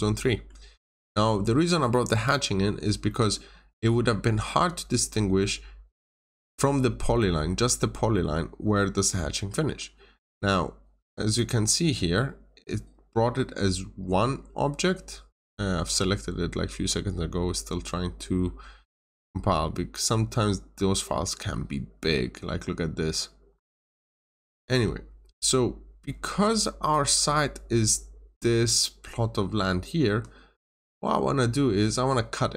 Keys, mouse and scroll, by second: 0.1 middle click, 1.3 scroll up 1, 1.8 middle click, 2.2 scroll down 1, 2.4-3.0 scroll up 1, 3.1 middle click, 4.0 scroll down 1, 4.5-7.0 scroll up 1, 7.5 scroll down 1, 8.0-8.5 scroll down 2, 8.1 middle click, 9.1 middle click, 9.6 middle click, 9.6 scroll up 1, 11.3 click, 20.2-20.5 scroll down 1, 23.0-23.8 scroll up 1, 24.4 middle click, 25.5-25.9 scroll up 1, 26.5 middle click, 30.0 Escape, 31.1 scroll up 1, 31.4 scroll down 1.